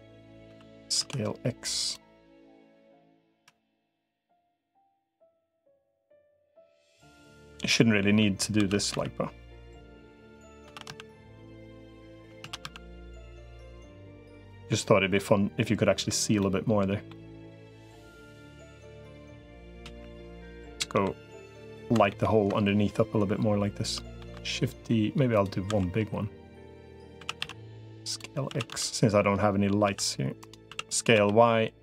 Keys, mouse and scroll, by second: 0.4 s, 2.0 middle click, 3.2 KP_1, 5.3-7.1 middle drag, 7.6 middle click, 8.6 shift+d, 10.6 shift+d, 12.4 shift+d, 14.6-15.9 middle drag, 16.2 middle click, 18.2 click, 19.6 KP_1, 20.6 KP_7, 22.0 ctrl+KP_7, 24.2 shift+d, 25.6 s, 27.0 s, 28.4 s, 30.6 s.